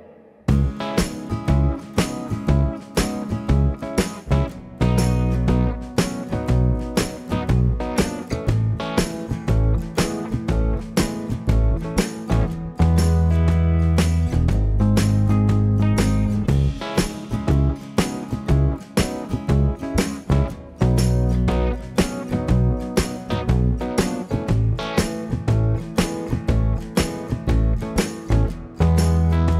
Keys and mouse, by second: 0.4 f, 0.4 f, 0.8 click, 0.8 middle click, 1.8 f, 3.2 f, 4.6 k, 5.5 2, 5.9 f, 7.0 f, 7.3 f, 7.7 f, 8.2 ctrl+x, 8.8 shift+click, 8.9 right click, 9.4 shift+click, 9.6 right click, 9.7 click, 10.3-29.5 right drag, 10.4-12.6 typing, 10.8 shift+click, 11.7 click, 12.1 shift+click, 15.3 1, 15.6 2, 16.0 f, 17.9 click, 18.2 f, 19.2 ctrl+f, 19.3 ctrl+z, 19.6 shift+click, 19.9-22.5 typing, 20.2 click, 21.8 shift+click, 21.8-23.8 shift+middle drag, 23.2 ctrl+KP_7, 23.7 click, 24.0 f, 25.3 f, 28.2 f, 29.1 f.